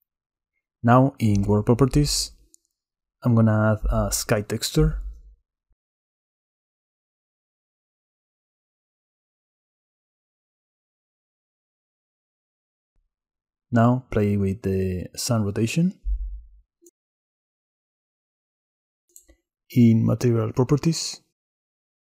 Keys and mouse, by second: 4.4-5.8 drag, 8.8 click, 11.7 click, 12.8 click, 14.6 shift+click, 17.1-19.1 drag, 20.3 click.